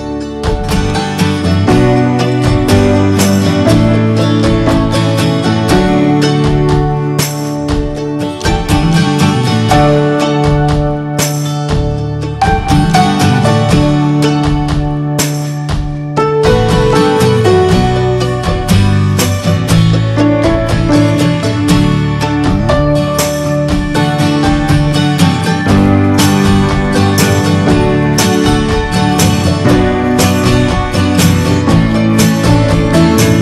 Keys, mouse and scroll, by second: 0.6 g, 1.6 shift+click, 3.1 ctrl+j, 3.1 middle drag, 3.2 scroll up 1, 3.7 click, 3.9-4.3 middle drag, 4.3 click, 4.9 g, 5.6 scroll down 3, 5.8 middle click, 6.2 ctrl+s, 7.7 middle click, 8.2 click, 12.2 click, 12.4 scroll down 2, 12.8 middle click, 13.1 scroll up 2, 15.0 ctrl+s, 15.3-15.9 middle drag, 15.9 click, 16.1 ctrl+a, 16.4 scroll down 2, 16.6-17.1 shift+middle drag, 17.1 click, 17.3 shift+a, 18.2 shift+middle click, 18.3 scroll up 1, 18.4 s, 19.8 s, 21.5 click, 21.7 click, 21.8 s, 22.8-23.2 scroll up 4, 23.0 middle click, 23.3 ctrl+a, 23.8-24.1 shift+middle drag, 24.1 ctrl+s, 24.3 click, 24.4 shift+middle click, 24.6 scroll up 1, 24.7 middle click, 24.9 drag, 25.2 s, 25.7 click, 25.9 middle click, 26.0-26.7 scroll up 4, 26.1 ctrl+s, 26.4 shift+middle click, 26.8-27.9 middle drag, 27.9 scroll down 5, 28.2 middle click, 28.3-28.7 scroll up 2, 28.7 ctrl+s, 28.7 click, 29.1-30.2 shift+middle drag, 30.2-31.1 drag, 32.2-33.0 middle drag, 33.0-33.4 ctrl+scroll down 2.